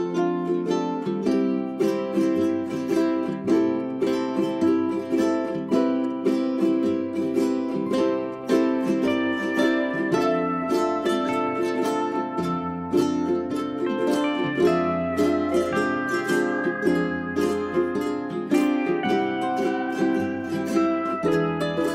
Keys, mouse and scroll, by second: 1.1-5.3 drag, 5.3 space, 6.1-7.8 drag, 8.3 j, 8.8 click, 11.1-13.6 scroll down 2, 11.3 click, 14.4-15.2 scroll up 1, 15.4-15.9 scroll up 1, 15.9 click, 18.9 ctrl+a, 19.4-21.9 drag.